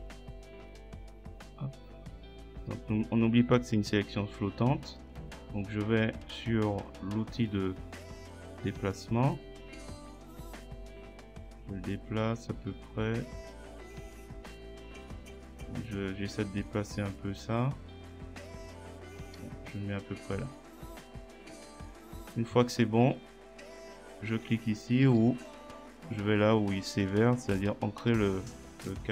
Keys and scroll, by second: 25.1 ctrl+z.